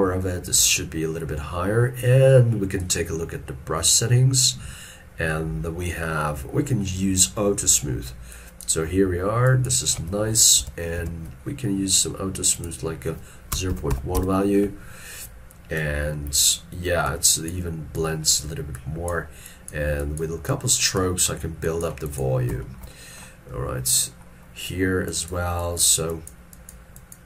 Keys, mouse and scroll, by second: 11.0 ctrl+z, 13.8 typing, 14.2 Return, 22.7 shift+middle click, 23.0 shift+middle click, 23.4 scroll down 1.